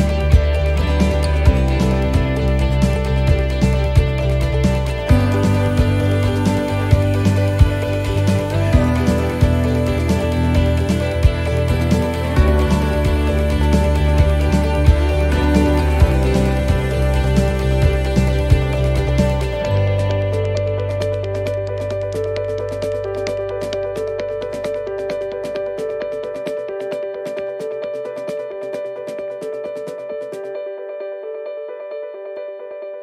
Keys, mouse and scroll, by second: 0.9 click, 0.9 scroll down 1, 1.8 shift+middle click, 2.2-2.7 scroll up 4, 2.7 shift+middle click, 4.4-4.8 scroll down 5, 4.9 shift+middle click, 7.2 shift+middle click, 9.9 shift+middle click, 10.6 shift+middle click, 13.4 shift+middle click, 15.1 shift+middle click, 15.6 shift+middle click, 16.3 shift+middle click, 17.5 shift+middle click, 19.3 shift+middle click, 22.8 shift+middle click, 23.5 shift+middle click, 24.2 scroll up 2, 24.8 shift+middle click, 25.6-26.6 scroll up 3, 26.7-27.1 scroll down 2, 27.1 shift+middle click, 27.8 scroll up 1, 28.2 shift+middle click, 28.7 scroll up 1, 29.2 shift+middle click, 30.4 click, 31.6-32.3 scroll up 3, 32.1 middle click.